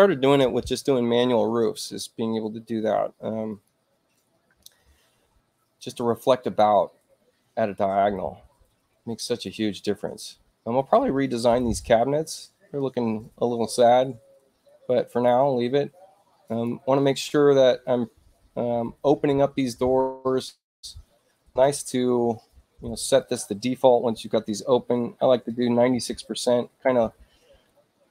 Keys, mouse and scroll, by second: 3.4 click, 6.4 click, 15.0 click, 16.4 click, 19.8 e, 24.3-25.1 typing, 25.2 Tab, 26.6 click.